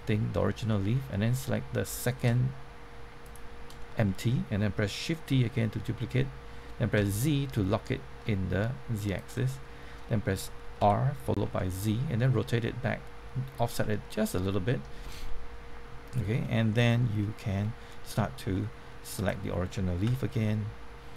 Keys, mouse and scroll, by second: 0.6 middle click, 3.2 shift+click, 3.8 middle click, 5.3 shift+d, 7.0 z, 9.1 click, 9.4 middle click, 10.8-11.9 typing, 13.5 click, 13.8-18.2 middle drag, 19.1 click, 20.0 Tab.